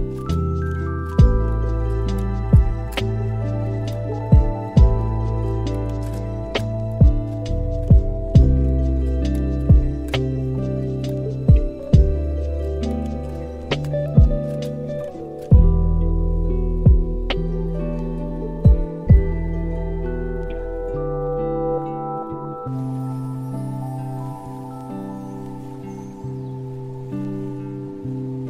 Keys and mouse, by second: 1.0 KP_7, 2.3 g, 4.3 shift+Tab, 5.0 s, 5.5 z, 6.0 s, 7.5 s, 10.6 g, 12.3 middle click, 13.4 shift+middle click, 14.1 g, 15.1 z, 15.7-16.4 middle drag, 16.7 g, 18.0 z, 18.6 shift+middle drag, 19.1 middle click, 20.5 click, 22.1-23.6 drag, 22.7 KP_0, 24.4-25.8 drag, 26.0-27.4 middle drag.